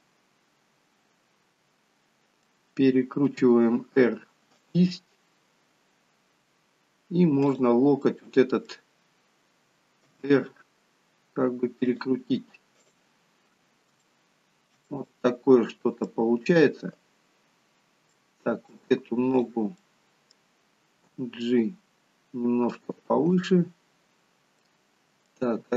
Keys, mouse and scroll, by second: 3.4 r, 7.5 click, 8.2 middle click, 10.2 r, 12.9 click, 14.0 shift+middle click, 14.9 middle click, 18.2 middle click, 19.4 click, 20.0 middle click, 21.2 g, 24.5 middle click, 24.5 click, 24.7 middle click, 25.6 g.